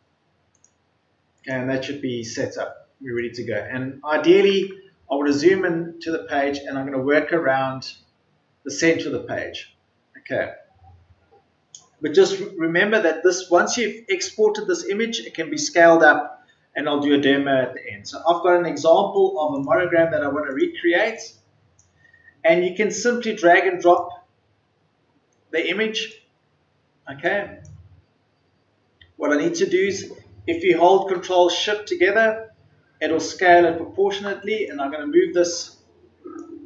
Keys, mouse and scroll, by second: 2.6 middle click, 3.3-4.0 scroll up 1, 4.0-4.6 scroll down 1, 4.7-5.1 ctrl+scroll up 1, 6.4 scroll down 1, 6.9-7.3 scroll up 1, 7.5-8.5 ctrl+scroll down 1, 19.5-36.6 drag.